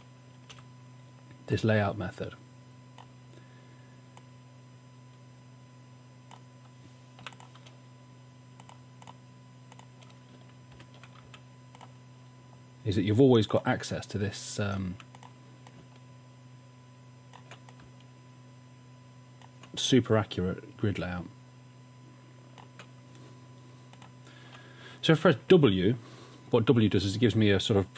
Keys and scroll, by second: 0.5 v, 7.3 i, 10.8 shift+Down, 11.2 v, 15.0 v.